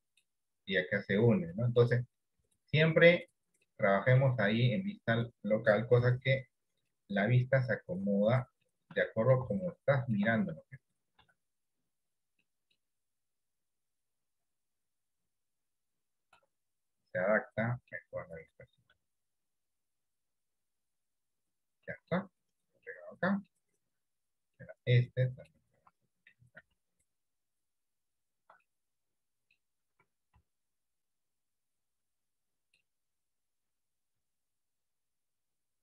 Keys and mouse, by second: 1.6 shift+middle click, 2.6 click, 3.9 middle click, 6.1 r, 7.6 click, 8.9 middle click, 10.0 shift+middle click, 11.3 r, 12.6 middle click, 13.6 click, 16.4-18.1 middle drag, 19.1 r, 21.0 click, 22.0 middle click, 22.9 middle click, 24.7 middle click, 26.7 g, 28.7-29.7 middle drag, 30.4 g, 32.2 middle click, 34.3 r.